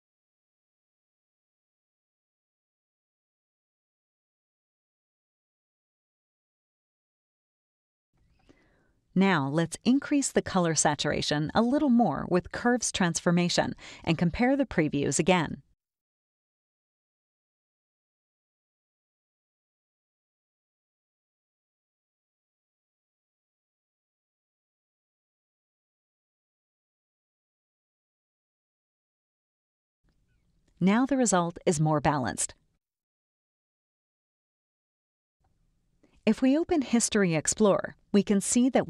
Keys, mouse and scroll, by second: 0.5-2.4 drag, 2.7 click, 3.6 ctrl+Right, 4.4 Left, 5.3 Right, 6.2 Left, 7.5 Right, 11.0 click, 13.1-14.4 drag, 15.2-17.4 drag, 18.4-20.0 drag, 20.8-22.3 drag, 23.9 click, 25.5 click, 26.0 click, 27.5 ctrl+Left, 28.0 ctrl+Right, 28.9 ctrl+Left, 29.5 ctrl+Right, 30.2 ctrl+-, 31.4 ctrl+Right, 32.2 ctrl+Left, 33.1 ctrl+Right, 34.0 ctrl+Left, 35.1 ctrl+Right, 35.9 click, 36.0 right click, 36.8 click, 38.2 click, 38.7 click.